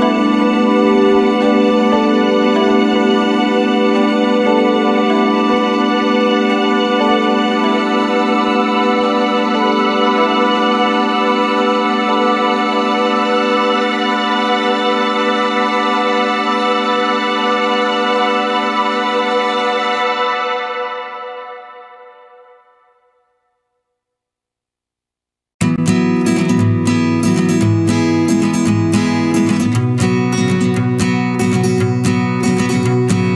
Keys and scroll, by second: 2.4 ctrl+=, 20.7 ctrl+z, 32.2 ctrl+-.